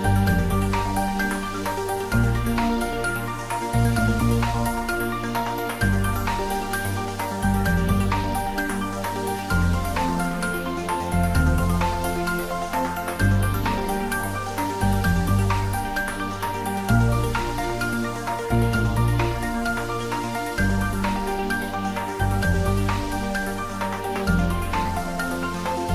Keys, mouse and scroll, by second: 0.5 click, 3.9 click, 7.7 click, 17.2 click, 25.4 click.